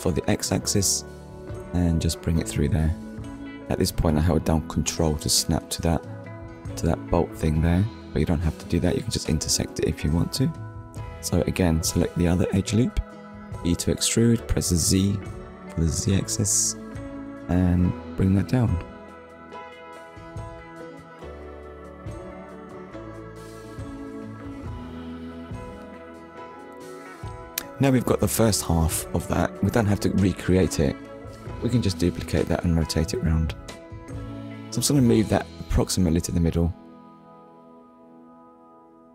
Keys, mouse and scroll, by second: 3.2 ctrl+click, 4.0 scroll down 1, 4.7 shift+middle click, 6.7 alt+click, 13.2 click, 13.7 scroll down 1, 14.4 shift+middle click, 17.4 click, 18.0 click, 18.6 click, 18.9 middle click, 22.8 click, 23.4 middle click, 24.5 scroll up 1, 25.5 scroll up 1, 27.1 middle click, 29.4 KP_1, 30.2 scroll up 1, 30.8 shift+middle click, 32.0 click, 36.2 scroll down 1, 36.8 shift+scroll down 1, 37.1 shift+middle click.